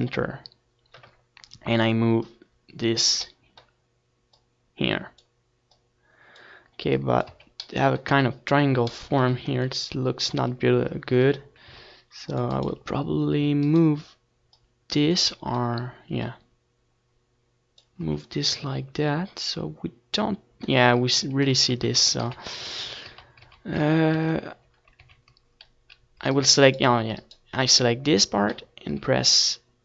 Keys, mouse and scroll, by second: 0.2 d, 1.0 s, 2.3-3.9 right drag, 2.5 w, 5.4-11.1 drag, 10.0 Tab, 11.6 Tab, 13.0 middle click, 13.3 a, 13.8 c, 14.7-16.2 drag, 16.2-19.5 right drag, 16.4-19.6 drag, 19.6 Tab, 19.8 middle click, 22.2 Tab, 22.6 ctrl+z, 22.9 ctrl+z, 23.0 ctrl+z, 23.2 ctrl+z, 23.5 ctrl+z, 23.9 ctrl+z, 24.2 ctrl+z, 24.5 ctrl+z, 24.8 ctrl+z, 25.2 ctrl+z, 25.7-27.1 middle drag, 26.1 ctrl+z, 27.1-29.7 right drag.